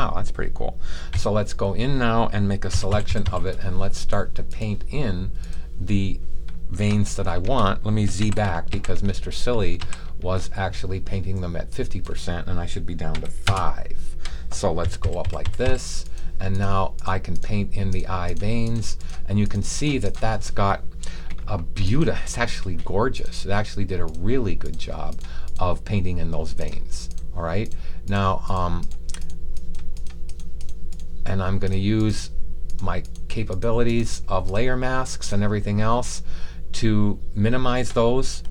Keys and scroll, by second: 1.1 b, 2.6 ], 2.8 ], 3.0 ], 3.2 ], 8.1 alt+super+z, 8.7 super+z, 9.7 alt+super+z, 13.0 5, 14.7-15.6 typing.